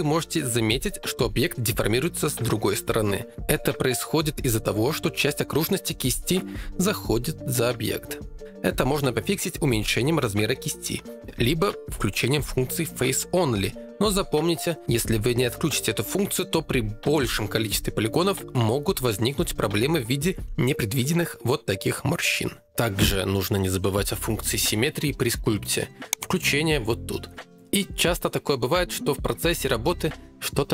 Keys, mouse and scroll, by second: 11.4-14.0 drag, 14.0 ctrl+z, 14.0 f, 26.1 click.